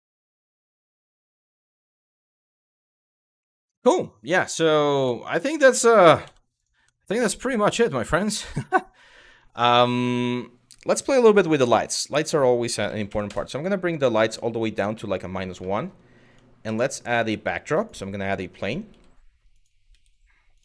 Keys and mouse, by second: 1.2 middle click, 4.7 Tab, 5.0 click, 5.9 Delete, 6.5 Delete, 7.2 middle drag, 8.4 middle click, 10.9 click, 11.8-13.0 drag, 14.7 middle click, 15.4 shift+middle drag, 16.3 shift+a, 18.5 g, 19.5 s, 20.2 click.